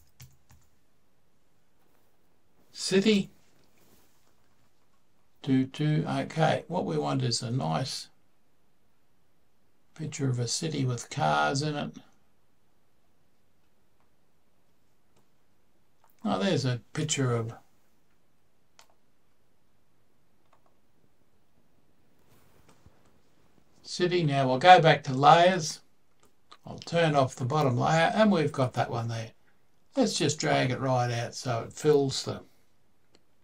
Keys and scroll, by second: 0.0-0.3 typing, 2.9 Return.